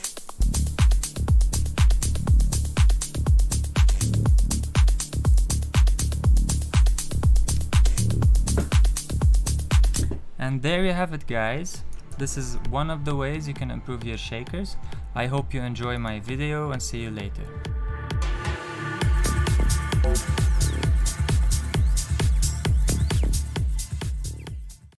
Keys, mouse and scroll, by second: 4.0 click, 9.8 space, 11.6 ctrl+alt+click, 15.9 click.